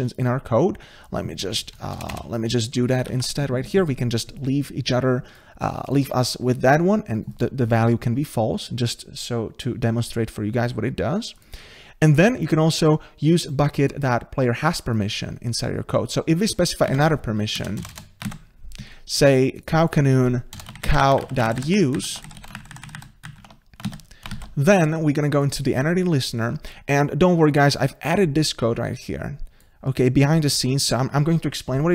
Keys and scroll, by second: 3.1 ctrl+s, 16.9 ctrl+c, 18.4 ctrl+v, 24.3 ctrl+s.